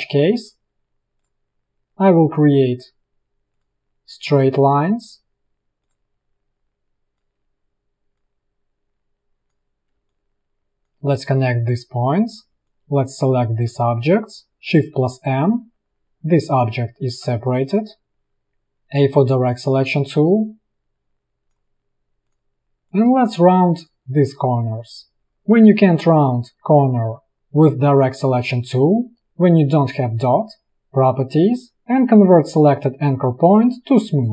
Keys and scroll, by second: 6.4 space, 10.1 space, 12.6 space, 15.0 shift+m, 16.2 space, 17.1 ctrl+z, 17.7 space, 18.9 a, 25.1 a.